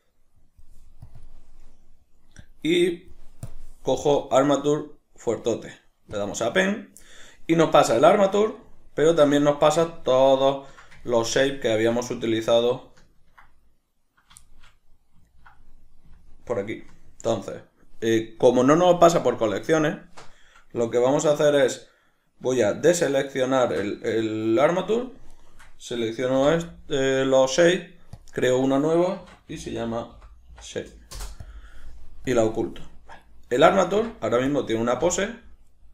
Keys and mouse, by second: 8.6-22.6 ctrl+middle drag, 22.6 shift+right click, 23.3 shift+right click, 25.3 shift+right click, 26.4 m, 32.3-33.2 drag, 33.2 right click, 34.0 Tab.